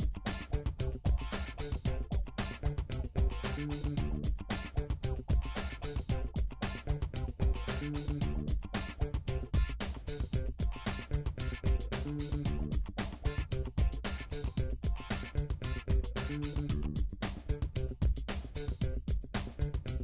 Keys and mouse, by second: 6.1 click, 6.1-8.1 middle drag, 6.8 KP_7, 8.1-8.9 shift+drag, 8.9 shift+middle drag, 9.1 shift+click, 9.2 shift+middle click, 9.3 click, 9.3-14.0 middle drag, 12.0 g, 15.3-16.7 shift+middle drag, 16.9 click, 17.0-19.3 shift+middle drag, 18.1 g, 19.3 click.